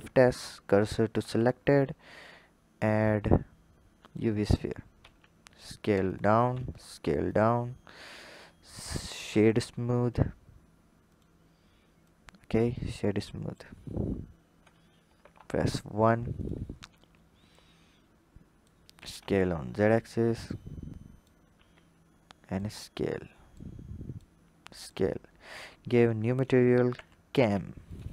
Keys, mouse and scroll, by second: 1.1 shift+a, 4.8 s, 6.3 s, 8.1-11.0 drag, 11.8 drag, 14.4 KP_7, 14.9 KP_1, 16.2 drag, 16.6-17.3 scroll up 1, 17.3 drag, 18.8 s, 20.3 click, 21.5 s, 23.3 click, 24.3 s, 25.3-27.8 drag.